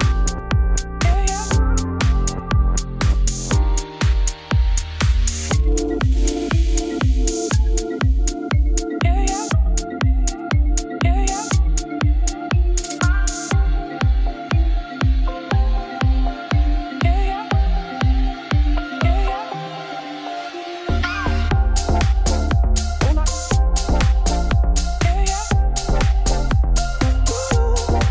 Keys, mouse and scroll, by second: 1.6 alt+d, 3.3 middle click, 3.4 scroll down 2, 3.9 z, 4.1 click, 4.3 scroll down 2, 4.4 middle click, 5.3-6.0 scroll up 4, 6.0-7.3 shift+middle drag, 7.3 click, 7.4 scroll up 4, 7.6-9.0 shift+middle drag, 9.0-10.0 drag, 10.0-10.4 scroll up 1, 10.4-11.6 middle drag, 13.2-15.4 drag, 15.4-16.4 middle drag, 16.4-19.4 drag, 19.8 Tab, 20.1 click, 20.5 shift+click, 21.2 middle click, 21.6 g, 22.6 Tab, 22.7 click, 23.2 shift+click, 23.7 shift+middle click, 24.1 shift+click, 24.5 shift+click, 24.7 middle click, 24.8 g, 26.6 middle click, 26.7 scroll down 1, 27.2 click, 27.5 middle click, 27.6 scroll down 1, 27.8 shift+middle click.